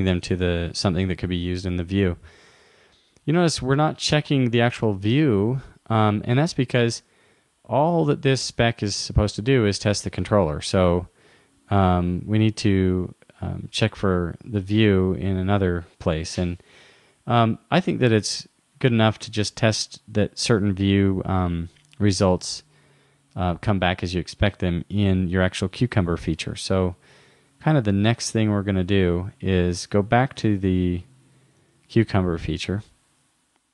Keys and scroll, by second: 31.6 super+w.